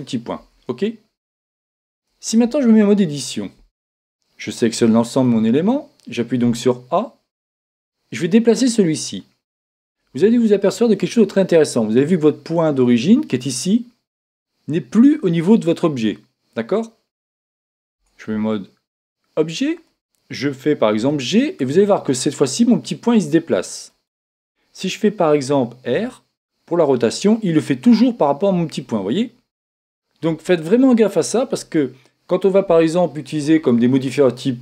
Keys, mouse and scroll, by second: 2.4 Tab, 4.8 a, 7.7-9.4 drag, 7.7 a, 18.0 Tab, 21.0 g, 24.1-25.8 drag, 26.0 r.